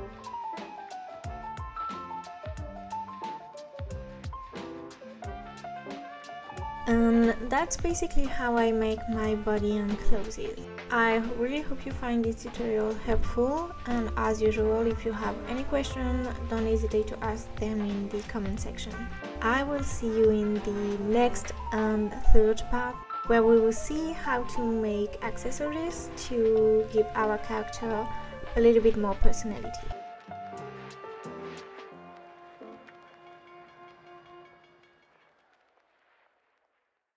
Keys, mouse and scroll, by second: 6.4 click, 6.4 scroll down 1, 7.2-8.2 scroll down 1, 8.2-9.1 scroll up 1, 9.1 click, 9.9-11.0 middle drag, 11.0 KP_3, 16.2 click, 16.3-16.7 scroll down 4, 16.7 middle click, 16.9 KP_1, 17.2 scroll down 1, 17.4 middle click, 17.9 KP_5, 18.9 scroll down 1, 19.0 middle click, 19.5 scroll up 1, 20.8 ctrl+s, 21.5 click, 24.0 scroll down 1, 24.2 middle click, 25.1-25.4 scroll up 2, 25.4 middle click, 25.6 KP_1, 25.6 KP_2, 26.1 scroll down 2, 26.2 scroll up 3, 26.5 middle click, 27.0 KP_5, 28.6-29.9 scroll down 1.